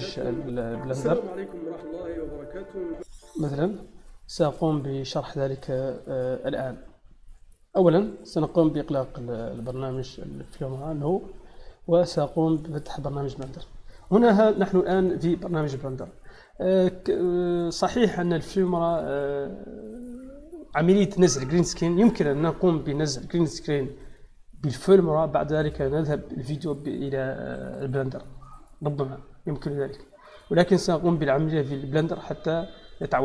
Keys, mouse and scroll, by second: 2.1 click, 4.9 click, 12.5 click, 13.5-14.3 middle drag, 14.7-15.1 middle drag, 21.9 click, 27.0 click, 30.2 click, 31.3 middle click.